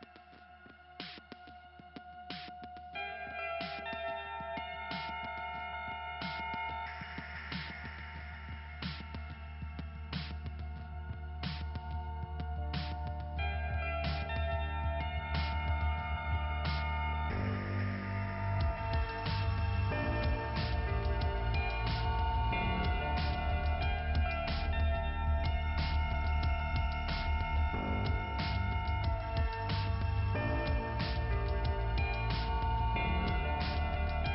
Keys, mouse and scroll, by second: 0.0 click, 0.1 click, 0.9 click, 1.3 click, 1.4 scroll down 1, 2.5 scroll down 1, 3.1 click, 4.6 click, 5.5 click, 8.7 click, 9.4 click, 11.4 click, 12.2-12.9 scroll up 2, 12.9 click, 14.4 click, 15.1 click, 16.0 right click, 16.7 click, 18.6 click, 20.0 click, 20.5 click, 20.9-21.8 scroll down 1, 26.6 click, 28.6 scroll up 2, 29.7 scroll down 1, 30.7 click, 32.9 click.